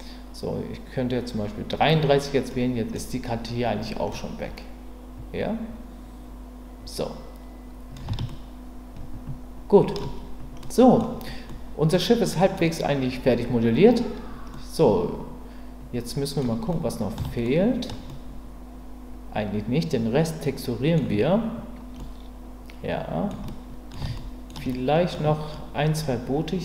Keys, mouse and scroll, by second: 2.5-2.9 middle drag, 4.1-7.9 middle drag, 8.3-9.9 shift+middle drag, 10.6-11.0 middle drag, 11.5-11.9 middle drag, 12.2 middle click, 14.6-16.4 middle drag, 16.7-17.1 middle drag, 17.5-17.9 shift+middle drag, 18.1-20.9 middle drag, 22.0-23.3 middle drag, 23.4-23.9 middle drag, 24.2 shift+middle click, 24.3 shift+drag, 24.7 click.